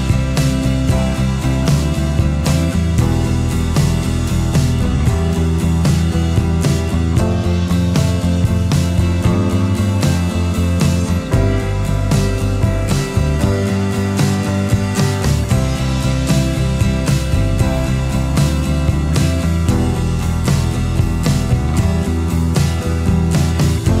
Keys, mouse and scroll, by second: 1.8 space, 2.9 space, 5.5 alt+scroll down 1, 5.6 space, 5.9-6.3 alt+scroll up 1, 6.5 alt+scroll up 1, 8.9 space, 12.1 space, 14.6 space.